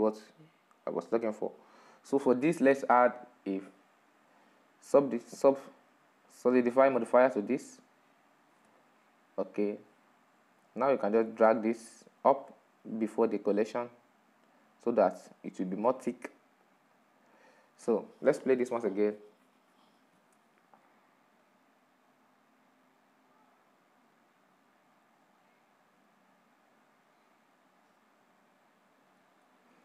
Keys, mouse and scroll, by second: 1.9-2.5 drag, 2.5 right click, 8.4 click, 9.1-15.2 middle drag, 15.2 click, 17.3 click.